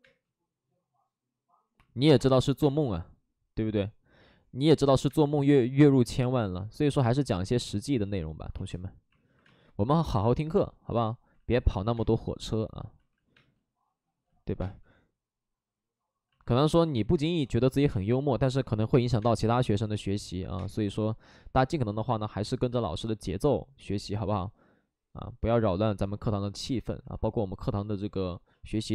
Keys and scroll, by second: 2.0 3, 2.1 space, 5.0 space, 5.8 space, 9.4 space, 9.8 space, 11.3 ctrl+z, 11.9 space, 13.3 ctrl+z, 13.3 space, 17.2 space, 17.8 space, 20.4 ctrl+z, 20.5 space, 21.3 ctrl+z, 22.7 space, 26.2 ctrl+z.